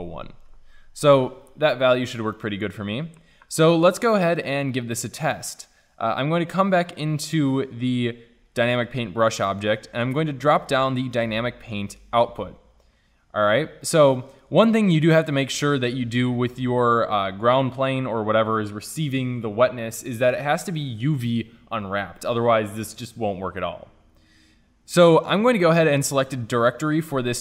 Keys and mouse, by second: 1.2-7.3 middle drag, 7.3-8.9 drag, 10.5-17.8 drag, 17.8-18.4 middle drag.